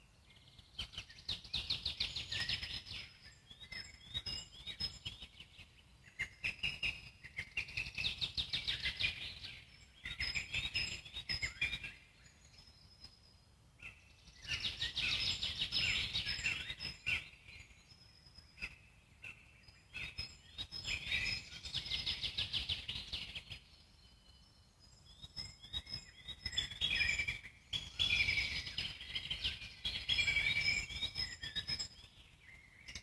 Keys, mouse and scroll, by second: 2.1 click, 3.1-3.9 alt+middle drag, 3.9 z, 4.4-7.7 alt+middle drag, 8.7 click, 9.2 click, 9.9 click, 10.4 click, 10.9-11.6 alt+middle drag, 11.6 g, 13.3-15.1 drag, 15.1 Tab, 16.1 alt+middle click, 16.8 click, 17.8 shift+click, 18.8 z, 19.2 alt+middle click, 19.8 g, 22.2 Tab, 22.5 alt+middle click, 23.2 g, 24.5 scroll down 1, 24.8-27.2 alt+middle drag, 27.2-27.6 scroll up 1, 27.6 Tab, 28.1 click, 28.3 z, 28.7-29.1 scroll up 2, 29.1 click, 29.5 alt+middle click, 30.1 alt+scroll down 1, 30.7 g, 32.2 alt+middle click, 32.7 z.